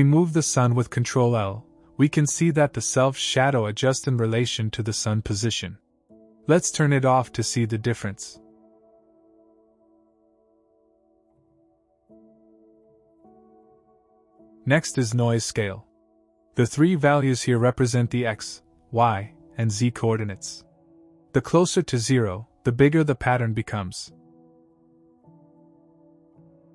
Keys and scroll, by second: 7.0 ctrl+l, 11.3 ctrl+l.